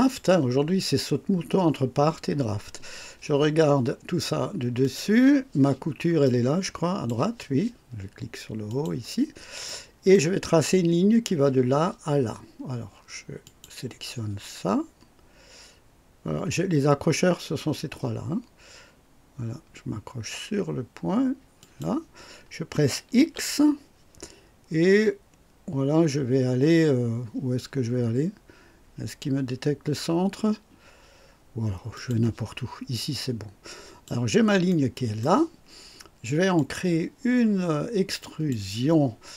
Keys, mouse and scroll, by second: 4.7 click, 6.1-7.2 drag, 8.6 click, 9.5-10.2 right drag, 13.3 click, 21.5 click, 23.1 x, 31.8 click, 33.0 click, 34.6 right click, 36.4 click, 38.1 click.